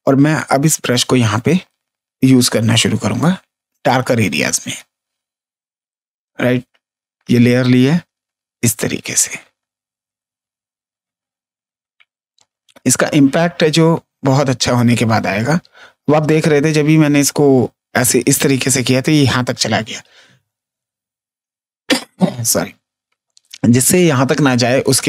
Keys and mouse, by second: 5.1 space, 5.4 click, 8.2 click, 9.3 space, 9.5 ctrl+click, 9.9 space, 10.1 click, 11.9 click, 14.1 ctrl+click, 14.8 ctrl+z, 17.8 click, 18.7 ctrl+space, 18.9 ctrl+click, 22.9 space, 24.5 ctrl+z.